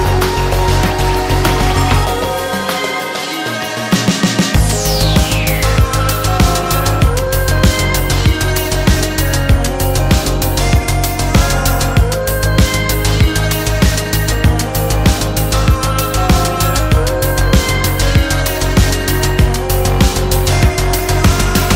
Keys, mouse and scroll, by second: 3.1 click, 4.3 click, 5.3 click, 7.7 click, 8.6 click, 9.4 middle click, 9.4-9.7 scroll up 1, 9.7 click, 10.4 click, 12.0 click, 12.6 click, 15.1 click, 15.9 click, 16.5 ctrl+z, 17.3 F1, 17.7 KP_Subtract, 18.9 click, 20.3 click, 20.5 middle click, 20.9 scroll up 1.